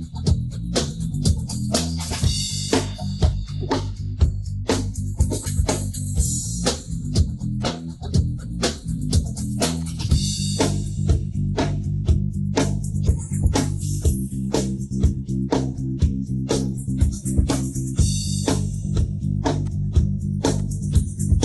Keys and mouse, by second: 0.2 click, 0.5-1.1 middle drag, 1.4-1.8 middle drag, 2.2-2.7 middle drag, 2.9-6.8 middle drag, 8.2 click, 9.9 click, 10.4 middle click, 11.1-12.2 middle drag, 12.4-12.7 middle drag, 12.9-15.5 middle drag, 15.8 middle click, 16.0-17.0 middle drag, 17.7 drag, 18.2-19.0 middle drag, 19.6 click, 20.6 click.